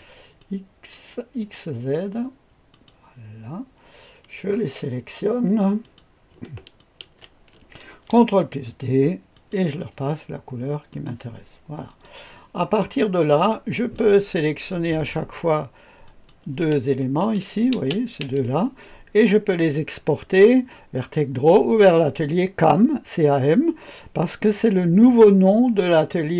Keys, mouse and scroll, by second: 0.3 click, 2.6 click, 4.5-5.7 scroll down 2, 5.7 click, 6.7 shift+click, 7.8 ctrl+d, 9.2 click, 10.8 click, 11.8 click, 13.0 click, 13.9-14.6 drag, 14.9 click, 15.4-17.8 drag, 17.7 space, 18.1 space.